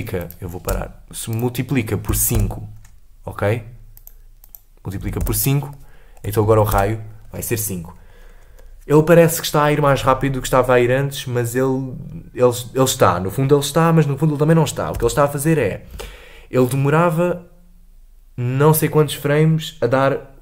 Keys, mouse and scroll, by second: 0.2 click, 1.2 space, 2.9-7.0 drag, 7.0 shift+Left, 7.2 space, 8.6-9.2 scroll down 3, 15.5 space, 16.4 space.